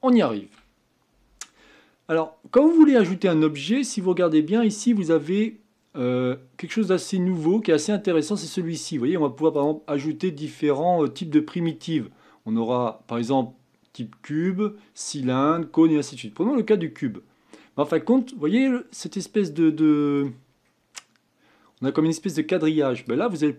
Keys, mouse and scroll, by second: 2.6-4.0 drag, 4.0-7.1 scroll down 2, 9.5-14.8 drag, 19.7-20.5 middle drag, 20.5-23.0 scroll up 2, 23.0 click.